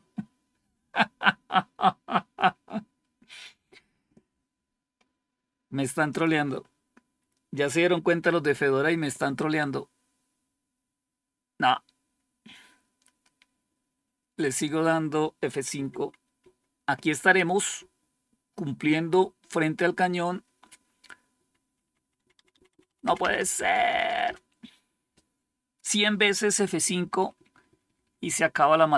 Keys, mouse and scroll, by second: 6.0 click, 7.9 F5, 16.3 F5, 17.6 F5, 20.3 F5, 21.2 …, 22.4 typing, 23.9-24.6 typing, 26.5 F5, 28.1 F5.